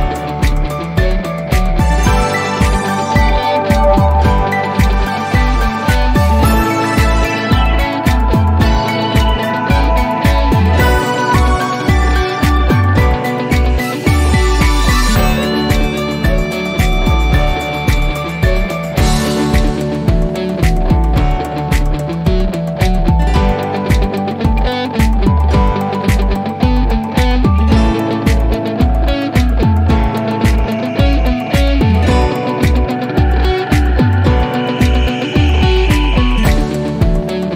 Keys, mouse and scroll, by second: 1.7 click, 2.6-3.7 scroll down 1, 4.7 scroll up 1, 4.8 click, 9.5 click, 14.6-15.1 drag, 15.9 shift+t, 16.1 e, 18.7 click, 21.1 click, 23.1 click, 25.2-26.4 typing, 26.5 Return, 28.1-31.7 drag, 32.5 2, 33.3 Return, 34.8 click, 36.7 click.